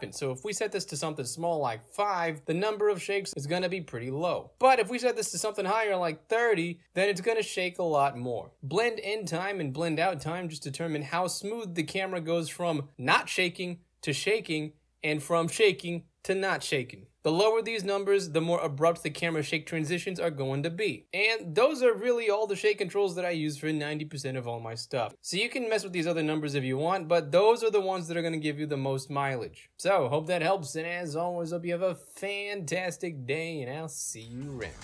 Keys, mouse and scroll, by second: 0.0 Return, 1.1 click, 1.6 click, 2.0 e, 4.7 click, 5.7 3, 6.0 0, 6.3 Return, 6.6 click, 6.7 e, 8.5 click, 9.9 8, 10.0 Return, 10.2 click, 10.5 8, 10.9 click, 11.0 e, 14.9 click, 15.7 1, 15.8 click, 16.0 1, 16.9 click, 17.4 click, 18.4 e, 25.4 Escape, 25.6-27.4 drag, 27.9-28.6 drag, 29.1-29.8 drag, 30.5 click, 30.9 e.